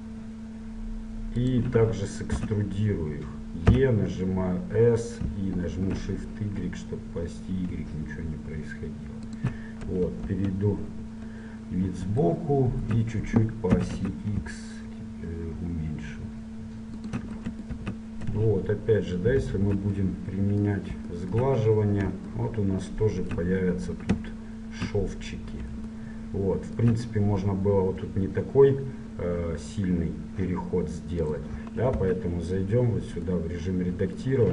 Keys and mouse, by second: 2.4 e, 10.0 KP_1, 10.3 KP_3, 11.1 KP_1, 14.0 s, 17.8 Tab, 19.5 ctrl+1, 29.2-31.4 middle drag, 31.4 click, 32.1 Tab, 33.5 click.